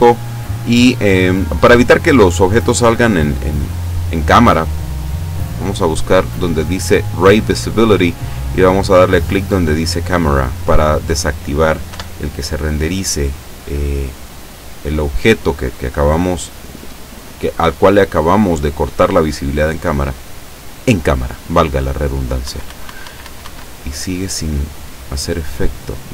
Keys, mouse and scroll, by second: 3.2 click, 3.8-4.4 scroll down 4, 5.9 click, 6.4-6.8 scroll down 1, 9.1 click, 11.9 F12, 22.5 Escape, 24.0-25.5 drag, 25.6 middle click.